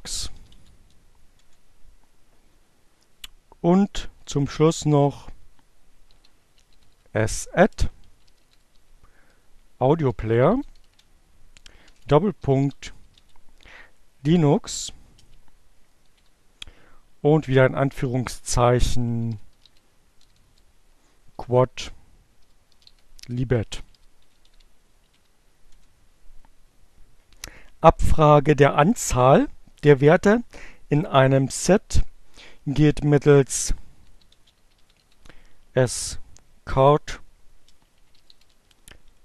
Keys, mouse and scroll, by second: 0.0-0.5 typing, 1.0 Return, 3.9 shift+s, 5.9 shift+a, 6.2 shift+d, 7.4-12.9 typing, 13.9 space, 14.1 shift+2, 18.6-19.7 typing, 21.3-22.4 typing, 23.9-25.5 typing, 31.6-34.8 typing, 36.7-39.2 typing.